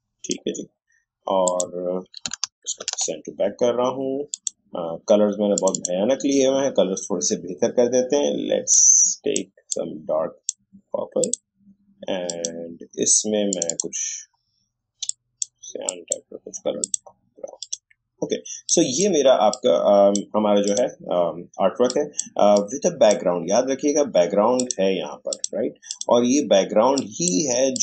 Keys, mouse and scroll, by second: 2.7 ctrl+shift+[, 4.3 click, 8.7-27.8 drag.